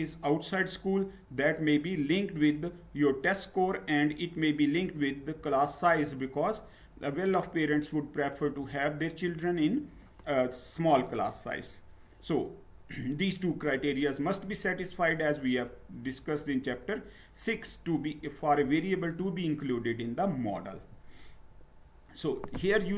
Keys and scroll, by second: 20.8 Down.